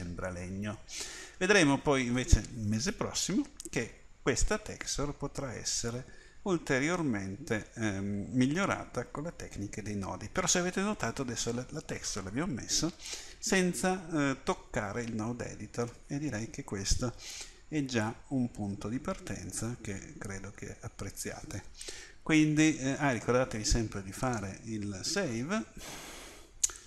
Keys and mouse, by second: 16.3 middle click, 16.9 middle click, 17.3-19.4 middle drag, 24.3-26.6 drag.